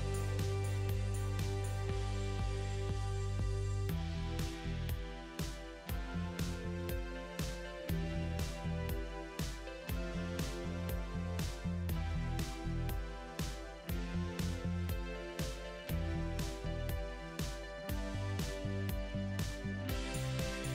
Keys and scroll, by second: 9.0 ctrl+z.